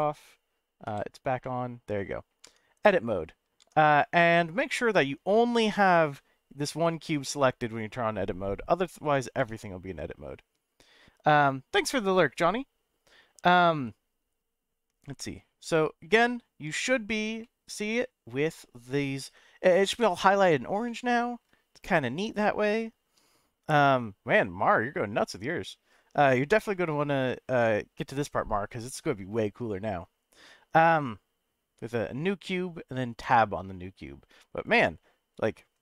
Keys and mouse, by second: 0.0 click, 0.8 n, 1.4-2.0 middle drag, 2.4 Tab, 3.6 Tab, 3.9 click, 5.7 click, 9.4 Tab, 17.4-19.3 middle drag, 20.9 shift+middle click, 22.4-23.4 middle drag, 26.7 middle click, 28.0-32.4 middle drag, 33.3 middle click.